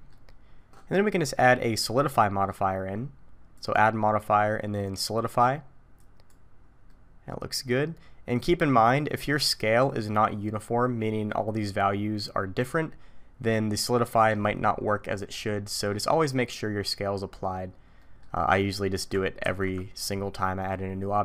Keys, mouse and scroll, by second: 0.3-2.7 scroll up 4, 3.6 click, 6.9 middle click, 18.0 middle click, 19.4 ctrl+a.